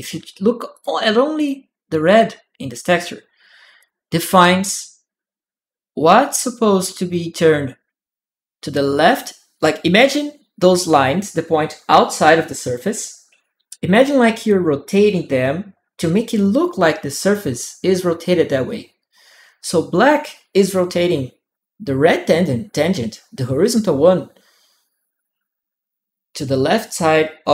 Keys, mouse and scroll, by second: 0.5 click, 1.1 click, 3.6 click.